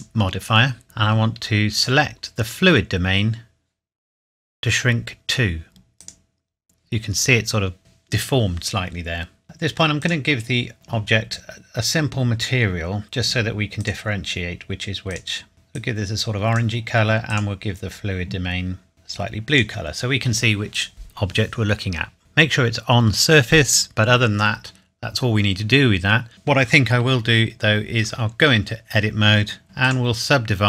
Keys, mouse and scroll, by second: 1.7 click, 6.0 click, 10.0 click, 11.1-13.1 scroll down 2, 13.1 scroll down 1, 14.7 click, 17.9 scroll down 1, 18.9 click, 28.0 Tab, 29.6 right click, 29.8 click.